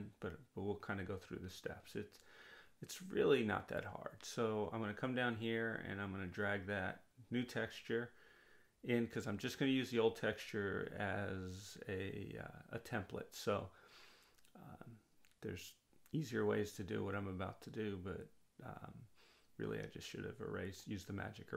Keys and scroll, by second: 17.3 ].